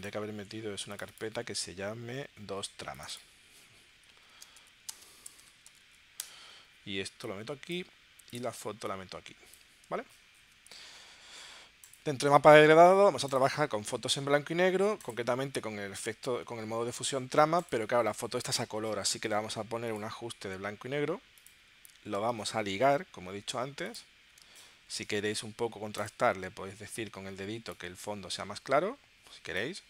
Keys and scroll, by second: 1.5 super+Tab, 2.4 super+Tab, 4.1-5.8 typing, 6.2 Return.